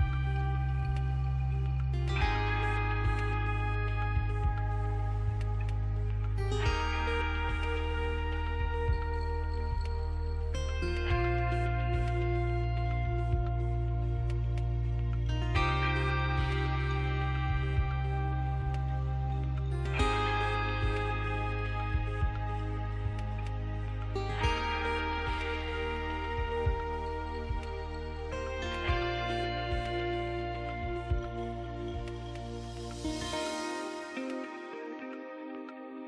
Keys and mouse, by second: 0.0-1.2 drag, 1.2 s, 2.8 e, 4.4-6.0 drag, 5.4 s, 7.2 e, 8.1 s, 11.3-13.4 drag, 13.4 e, 14.2 s, 16.1 z, 17.6 f, 19.2 KP_1, 20.8 click, 21.6 a, 21.8 a, 23.2 s, 28.6 e, 29.3-31.8 drag, 33.1 ctrl+Tab, 35.2 ctrl+Tab.